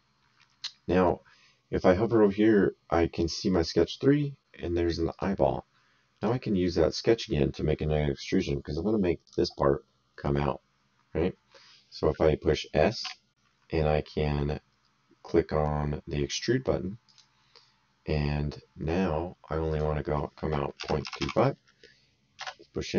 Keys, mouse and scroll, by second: 5.1 click, 6.2 click, 7.3 middle click, 9.2 click, 13.0 s, 17.0 click, 19.7 click, 21.0 KP_2, 21.2 KP_5, 22.3 Return.